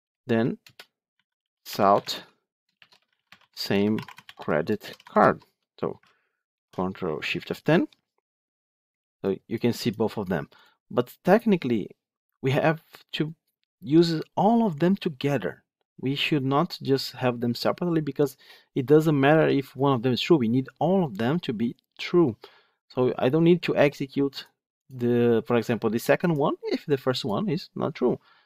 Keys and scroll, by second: 1.9 Tab, 6.4 ctrl+shift+F10.